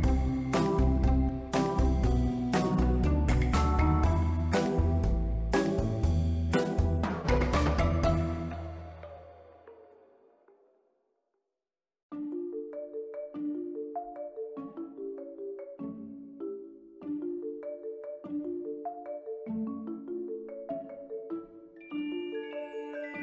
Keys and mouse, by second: 0.7 click, 0.8 Tab, 2.8 KP_Decimal, 3.1-3.7 middle drag, 3.8 ctrl+middle click, 4.4 middle drag, 5.0-5.7 drag, 5.8 s, 6.4 click, 6.6 middle drag, 7.3-7.8 drag, 8.0 middle click, 8.7 Tab, 9.0 1, 9.2 click, 9.4 b, 10.6 click, 11.4 middle click, 11.9 click, 12.1 b, 13.0 click, 13.8 b, 14.7-15.1 drag, 15.2 Tab, 15.7-16.1 ctrl+middle drag, 16.7 q, 19.8 shift+middle drag, 20.5 ctrl+middle click, 21.4 shift+middle click, 23.0 Tab.